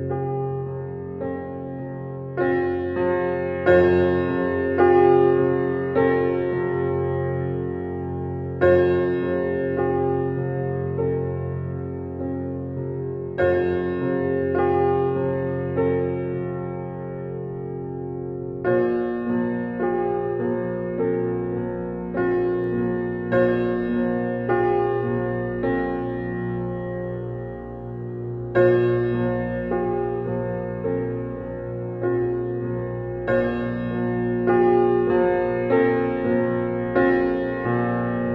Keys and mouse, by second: 2.1-4.4 drag, 6.3 click, 7.1 click, 8.1-9.2 drag, 9.6 click, 10.4-11.9 drag, 13.0 click, 15.5 ctrl+,, 16.6-19.2 drag, 20.4 click, 22.3-23.9 drag, 26.4 click, 27.6-28.7 drag, 29.3-30.1 drag, 32.6-33.4 drag, 34.2 ctrl+s, 35.9 click, 37.3-38.3 ctrl+alt+drag.